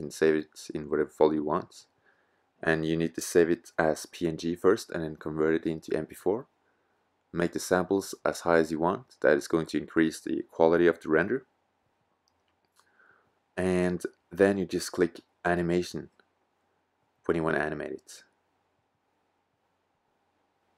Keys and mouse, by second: 11.2 KP_0.